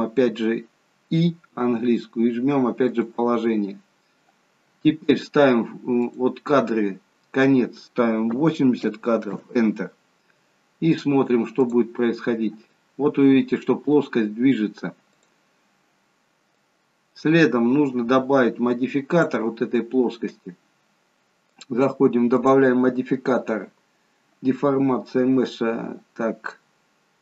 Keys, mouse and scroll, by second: 6.0 click, 11.6 click, 15.1 click, 16.6 click, 21.6 click, 22.4 click.